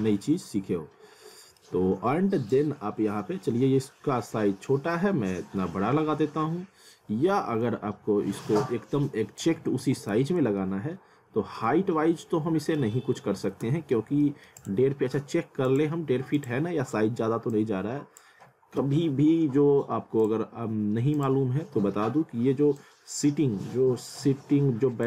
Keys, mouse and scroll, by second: 0.0-0.3 scroll down 1, 0.6 F3, 1.1 scroll up 1, 1.3 middle click, 2.5 click, 9.6 w, 10.1 z, 10.6 alt+middle click, 12.6-14.1 typing, 14.2 middle click, 14.6 click.